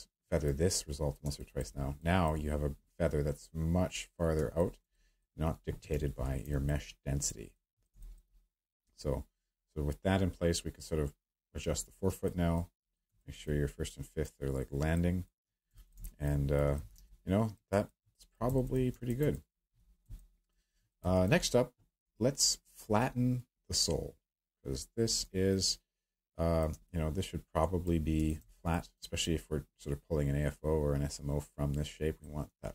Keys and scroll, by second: 5.9 w, 16.9 q.